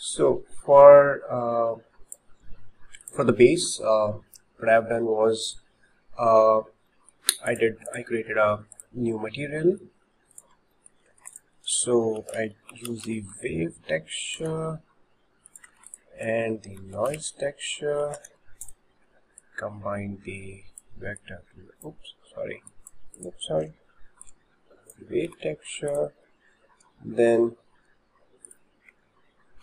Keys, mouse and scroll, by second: 3.0 click, 5.4 shift+middle click, 6.0 scroll down 3, 6.6 scroll down 1, 7.3-7.9 shift+middle drag, 7.5 click, 7.9 click, 8.8-9.7 drag, 9.7 shift+middle click, 10.4 click, 10.8 shift+middle click, 15.8 shift+a, 19.4 click, 21.3 click, 22.7 click, 23.2 click, 23.7 Delete, 24.3-25.2 drag, 25.7 shift+a.